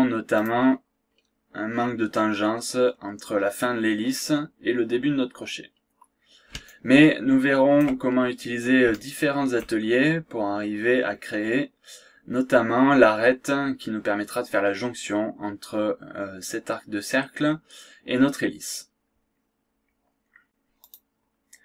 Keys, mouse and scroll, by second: 0.3 click, 1.1 scroll down 2, 1.6-2.0 scroll up 2, 2.8-3.1 scroll down 2, 3.3 scroll up 2, 4.0-4.3 scroll down 2, 5.6-6.0 scroll down 2, 6.0 scroll up 2, 6.6-8.0 shift+right drag, 8.3-8.8 shift+scroll up 1, 8.9 shift+right click, 10.1 scroll down 1, 10.4-11.4 scroll up 2, 11.7-12.0 scroll down 2, 13.3-13.8 scroll up 4, 14.3 scroll down 2, 16.1 scroll up 2.